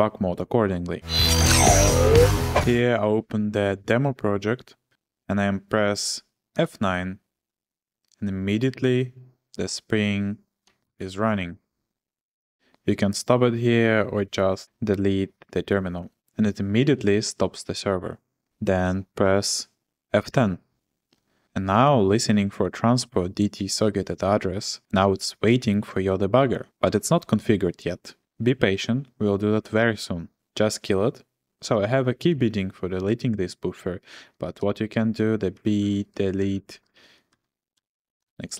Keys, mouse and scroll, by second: 6.5 F9, 10.8 shift+g, 20.2 F10, 34.6-38.2 typing.